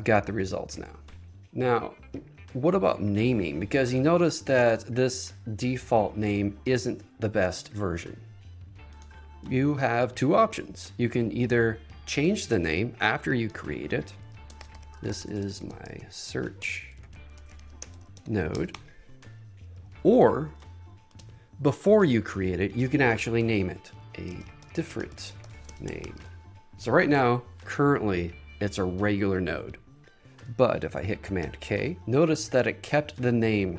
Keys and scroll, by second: 14.7 shift+t, 15.0 space, 16.7 BackSpace, 18.1 space, 21.2 Return, 24.1 shift+a, 24.2 space, 27.7 space, 31.5 super+k, 32.0 Return.